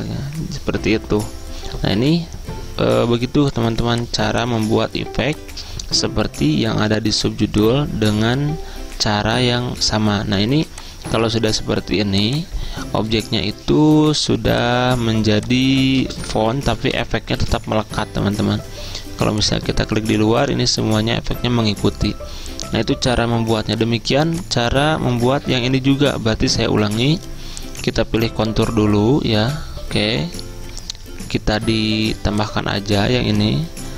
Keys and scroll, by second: 16.4-17.6 typing, 17.7 Escape, 20.9 typing, 25.2 ctrl+z.